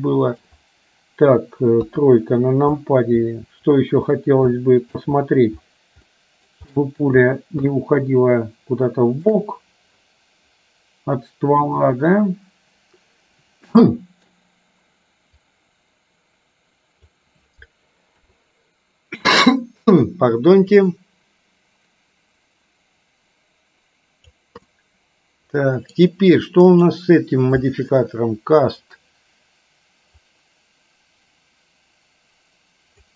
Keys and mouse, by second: 0.0 middle click, 1.9 KP_3, 4.7 shift+middle click, 6.3 shift+middle click, 7.8-9.4 shift+middle drag, 11.9-14.4 middle drag, 15.5-17.2 drag, 21.2-24.5 drag, 24.9-26.0 middle drag, 26.8 click, 30.5-33.1 drag.